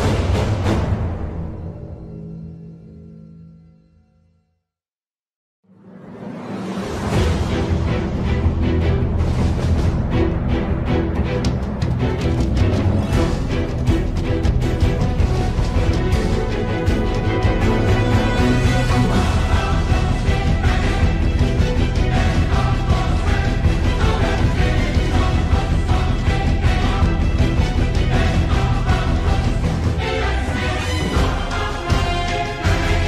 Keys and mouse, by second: 4.0 Tab, 5.4 4, 7.8 3, 18.8 x, 20.1 c, 27.9 ctrl+KP_7, 30.8 c.